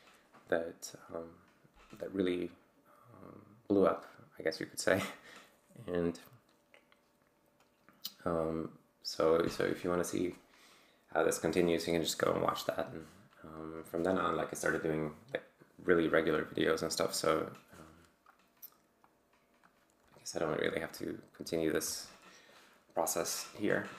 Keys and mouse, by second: 19.1-19.8 drag, 20.2 click, 20.6-21.0 drag, 21.7 ctrl+alt+g.